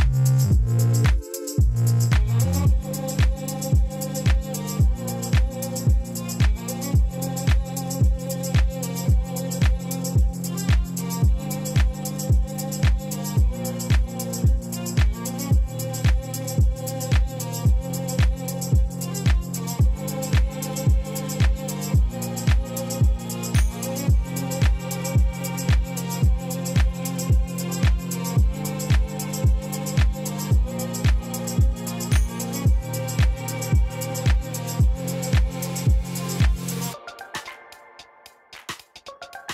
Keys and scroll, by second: 0.2 Tab, 6.1 Tab, 7.6 shift+s, 8.6 Tab, 9.1 shift+a, 13.0 shift+a, 16.7 r, 16.9 x, 17.0 9, 17.2 0, 17.5 Return, 18.2 shift+z, 25.7 2, 25.9 Return, 28.6 shift+z, 30.4 y, 32.3 1, 32.7 Return, 36.8 2, 36.9 5, 37.0 Return, 37.9 3, 38.1 Return.